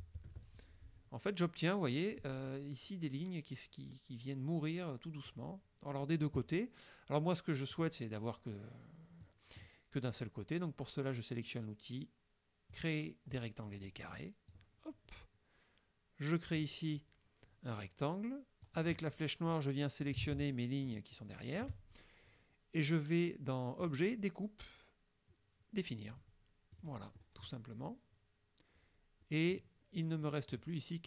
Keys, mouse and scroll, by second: 0.5 ctrl+click, 7.8 click, 9.3 click, 12.8 click, 14.6-16.8 drag, 18.7 click, 20.9 shift+click, 23.9 click, 26.2 click, 26.8 click, 27.2 middle click, 27.9-29.8 drag, 30.6 click.